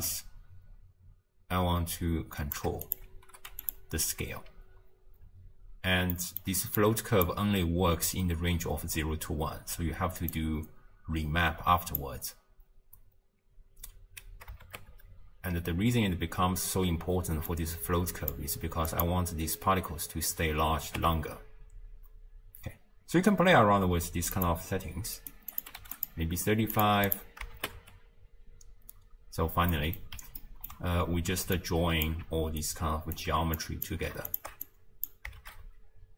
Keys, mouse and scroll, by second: 0.1-3.7 shift+drag, 4.3 space, 5.2 space, 6.2-6.8 middle drag, 6.8 click, 10.3 click, 14.7 shift+space, 16.6 space, 17.5-20.9 drag, 20.9 shift+space, 23.1 space, 24.4 click, 25.6 click, 26.8 click, 27.6 shift+space, 29.5 space, 29.7-31.6 middle drag, 31.6 click, 32.6-33.6 alt+right drag, 33.6 click, 34.3 alt+shift+click, 34.7 click, 35.5 shift+space.